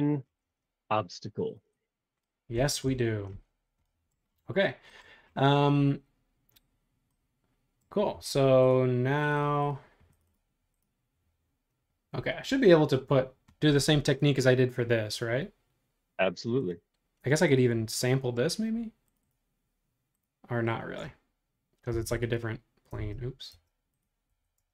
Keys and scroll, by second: 13.8 super+z, 21.9 b, 23.0 super+z, 24.3 Escape, 24.6 space.